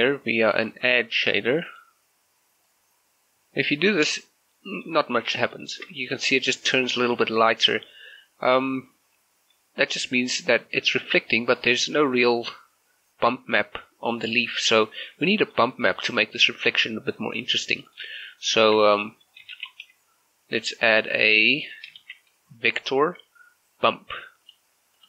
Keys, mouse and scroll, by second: 1.0-4.6 drag, 4.6 middle click, 5.2-5.5 scroll up 1, 5.6 shift+middle click, 5.9 middle click, 8.0-9.8 scroll down 1, 15.2 scroll down 1, 15.4 shift+middle click, 16.2 click, 17.5 g, 18.0 click, 19.0 shift+middle click, 19.6 shift+a, 22.0 shift+a, 24.5-25.0 drag.